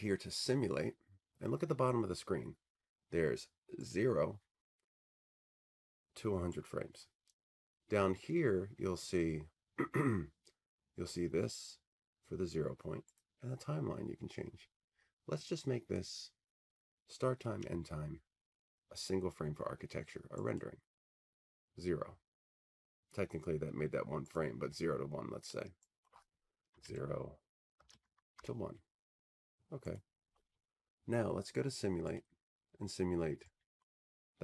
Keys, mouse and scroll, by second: 0.5-2.7 drag, 4.0-6.2 drag, 6.7-8.1 drag, 8.8 click, 13.3-15.4 drag, 16.0-18.2 drag, 19.8 typing, 20.8-22.8 drag, 24.4-28.3 drag, 26.8-28.4 typing, 27.9 Tab, 30.0-31.9 drag, 34.0 click.